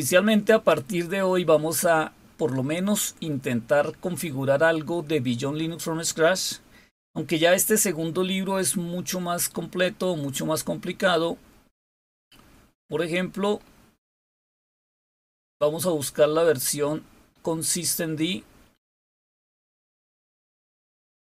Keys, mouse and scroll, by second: 6.3-7.3 scroll down 2, 8.0-8.7 scroll down 2, 9.3-10.2 scroll up 2, 10.3-12.1 scroll up 2, 13.3-13.7 scroll up 2, 14.8 scroll down 2, 15.4 scroll down 2, 16.2-16.8 scroll down 4, 17.3 scroll up 2, 17.9 scroll up 2, 18.4-19.2 scroll up 1, 19.8 click.